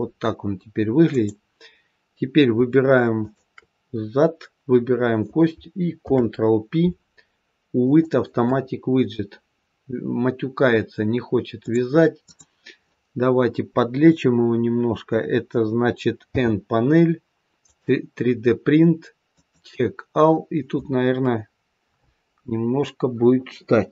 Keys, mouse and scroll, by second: 1.0 click, 3.0 shift+click, 5.9 ctrl+p, 11.5 click, 12.1 click, 16.2 n, 17.5 click, 19.2 click.